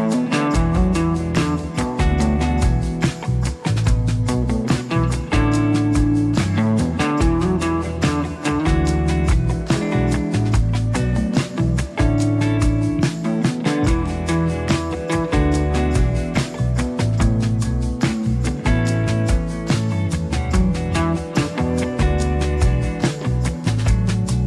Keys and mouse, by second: 0.5 middle click, 0.8 middle click, 1.1 f, 1.2 click, 1.8 click, 2.1 click, 2.3 click, 2.6 click, 2.8 click, 3.3 click, 3.5 click, 4.0 click, 4.2 click, 4.4 click, 4.6 click, 4.8-6.6 drag, 4.8 f, 6.8 middle click, 7.1 click, 7.9 click, 8.4 click, 8.7 click, 9.6 ctrl+r, 10.2 click, 11.2 middle click, 11.8 ctrl+z, 11.8 3, 11.8 2, 12.0 ctrl+click, 12.2 ctrl+click, 12.5 ctrl+click, 13.3 middle click, 13.7 ctrl+click, 13.8 g, 13.9 s, 15.6 ctrl+middle click, 15.7 g, 17.4 r, 18.3 ctrl+1, 19.0 click, 19.3 ctrl+z, 19.3 r, 19.8 g, 21.4 click, 22.1 g, 24.3 click, 24.3 g.